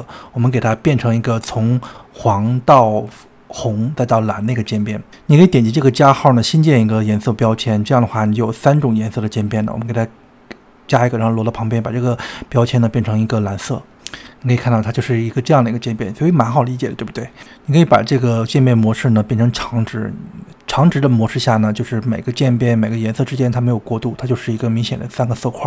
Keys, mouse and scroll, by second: 1.0-1.7 drag, 4.9 click, 5.8-13.3 drag, 15.9-17.9 drag, 17.9-18.4 scroll up 2, 18.4-19.2 middle drag, 19.2-20.8 scroll down 2, 20.8-22.8 drag, 23.1-24.7 drag, 24.8 click, 25.4-25.6 drag.